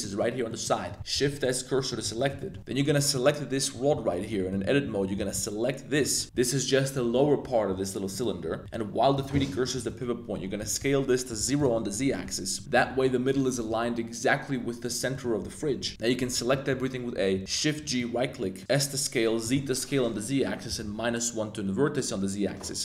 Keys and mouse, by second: 0.0 middle click, 0.4 middle click, 0.9 shift+s, 1.7 middle click, 2.0 z, 2.2 middle click, 2.4 shift+click, 2.6 z, 2.8 Tab, 3.1 click, 3.7-5.1 typing, 3.9 Tab, 4.3 middle click, 6.3 g, 8.1 click, 8.7-9.2 drag, 9.5 middle click, 9.9 middle click, 10.4 s, 10.6 z, 11.3 0, 11.5 click, 12.5 shift+middle click, 15.1 middle click, 15.7 middle click, 15.9 a, 16.2 a, 16.5 middle click, 17.4 shift+d, 17.9 click, 18.4 middle click, 18.6 s, 19.4 z, 20.7 -, 20.8 1.